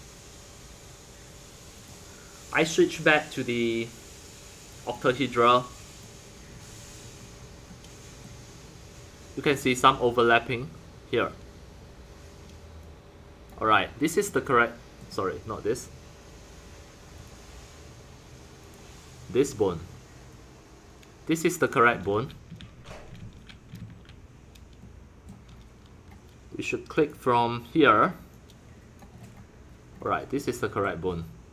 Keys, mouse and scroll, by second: 1.4 middle click, 1.8-6.5 drag, 6.5 scroll down 2, 6.6-9.6 middle drag, 6.6-7.4 scroll, 8.2 scroll, 9.6 click, 12.8 click, 13.6-17.2 middle drag, 17.2-22.0 drag, 22.0 ctrl+z, 22.5 ctrl+z, 23.1 ctrl+z, 23.7 ctrl+z, 24.8 middle drag, 25.2-27.1 middle drag, 27.1-29.1 drag, 29.1-29.6 scroll up 5, 29.6 scroll down 2, 29.9-30.3 scroll up 3, 30.3-31.5 middle drag.